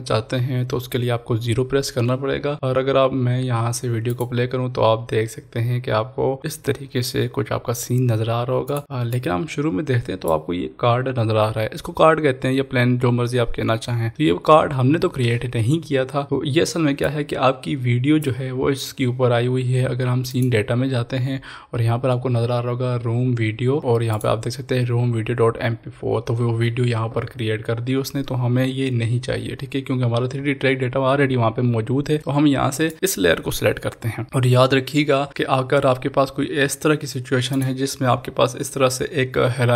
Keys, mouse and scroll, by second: 4.1 click, 8.8-12.6 drag, 17.1 click, 17.2-20.4 drag, 23.8 click, 32.9 click, 32.9 click, 37.5 click.